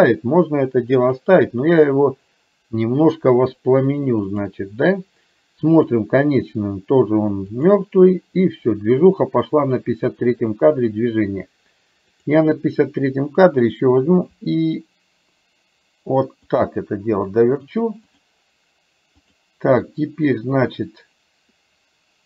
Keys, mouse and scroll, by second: 4.4 click, 5.8 click, 7.7 click, 12.3 click, 14.4 r, 18.3 click.